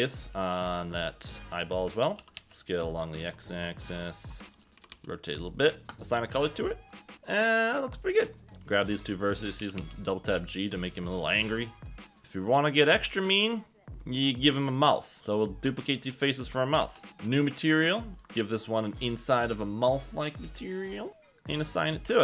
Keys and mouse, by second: 2.2 s, 2.3 x, 4.5 click, 4.7 r, 4.9 r, 5.9 click, 7.2 Tab, 8.4 g, 8.6 shift+middle click, 9.6 g, 9.8 g, 11.3 click, 12.2 KP_1, 12.9 Tab, 15.2 3, 15.8 shift+click, 16.8 shift+d, 17.5 click, 19.0 click, 21.7 click.